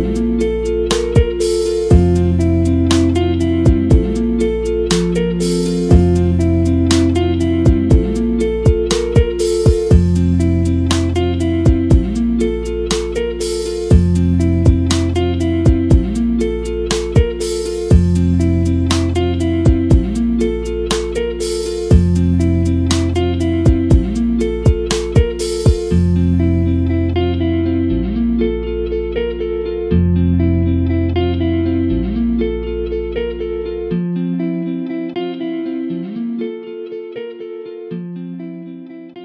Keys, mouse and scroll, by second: 0.0 scroll down 2, 3.4 click, 5.4 scroll down 1, 5.7 click, 5.7 scroll up 1, 6.0 click, 6.9 click, 7.0-8.2 scroll down 1, 8.2-8.8 scroll down 2, 8.5 click, 8.8 middle click, 9.2 click, 9.7 click, 10.3 scroll up 1, 12.0 click, 12.1 middle click, 12.3-14.2 scroll up 1, 14.2-14.7 drag, 14.7 scroll down 1, 18.1-20.6 middle drag, 20.6 scroll up 1, 21.3 shift+middle click, 21.4-22.3 scroll up 10, 22.3-22.9 scroll down 10, 22.9 shift+middle click, 23.0 scroll up 1, 23.5 middle click, 23.7 shift+middle click, 23.8 scroll up 9, 24.8 scroll down 8, 25.0-25.3 shift+middle drag, 25.3 scroll up 1, 26.3 scroll down 2, 27.3-29.8 middle drag, 29.8 click, 30.2 KP_Decimal, 30.6 scroll up 6, 30.9 shift+middle click, 31.3 scroll up 1, 31.5 shift+middle click, 32.0 scroll up 1, 32.4 scroll down 2, 32.9-34.6 scroll up 1, 36.4-39.2 scroll down 2.